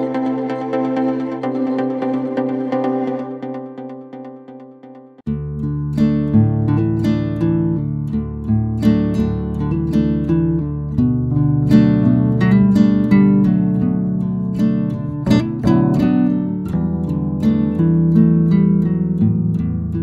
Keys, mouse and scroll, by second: 0.0 middle click, 0.7 c, 7.5 click, 8.3 middle click, 9.0 scroll down 2, 9.2-10.3 middle drag, 10.3-11.2 scroll up 1, 11.2 c, 14.2 middle click, 15.1-16.8 shift+drag, 16.8 Return, 17.3 click, 17.8-19.4 middle drag, 19.8-20.0 middle drag.